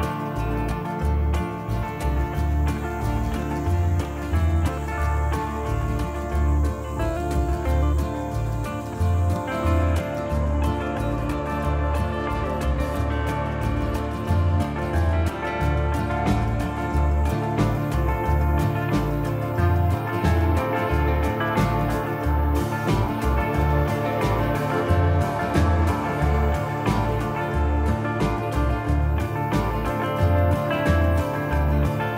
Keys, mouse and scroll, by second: 1.4 click, 4.7 middle click, 6.6-7.0 scroll up 2, 7.0 middle click, 8.4-8.7 scroll up 1, 8.7 middle click, 12.1 click, 20.4 click, 23.7 click, 28.9 middle click, 29.4-29.9 scroll down 3, 29.7 middle click, 30.8 shift+middle click, 31.1 middle click.